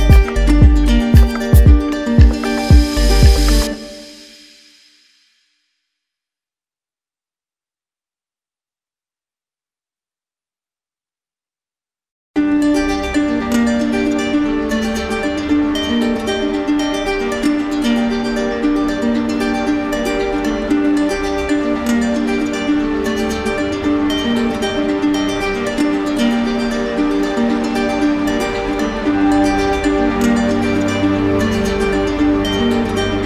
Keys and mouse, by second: 0.3 click, 0.8 shift+click, 3.0 alt+click, 4.7 alt+click, 5.3 alt+click, 13.3 click, 14.7 click, 15.4 alt+click, 18.0 click, 18.4 click, 19.8 alt+click, 21.8 alt+click, 22.0 d, 22.2 d, 22.4 d, 22.6 d, 24.0 z, 24.9-26.0 drag, 28.4-29.5 drag, 29.7 right click, 30.8 click.